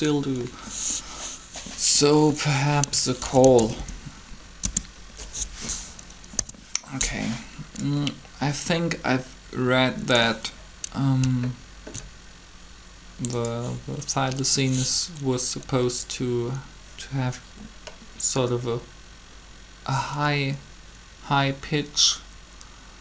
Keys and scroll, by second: 3.1-3.6 typing, 4.4 Return, 6.4 3.